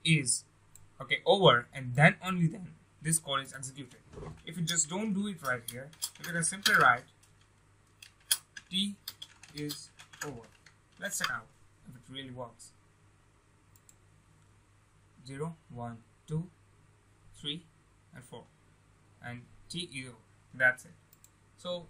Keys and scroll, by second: 6.6 ctrl+space.